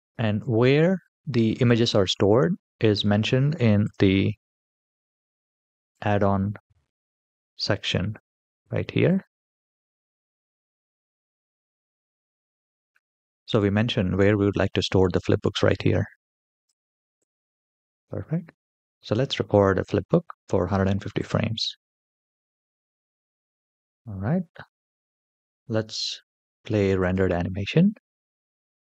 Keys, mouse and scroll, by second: 2.7-4.0 drag, 20.9 click, 26.8 click.